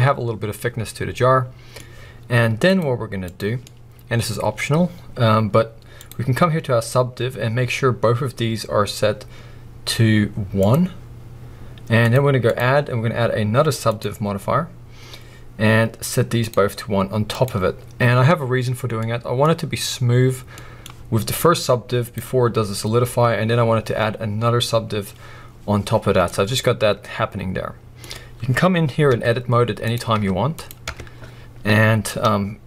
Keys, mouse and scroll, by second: 2.7-3.6 drag, 3.6-6.0 middle drag, 4.2-6.0 scroll up 2, 6.0-19.0 drag, 19.0-21.6 middle drag, 21.6 click, 26.0 scroll down 1, 26.2-29.1 middle drag, 28.1-29.1 scroll up 2, 29.1 Tab, 29.8 click, 30.2 Tab, 30.5 click, 31.0 Tab.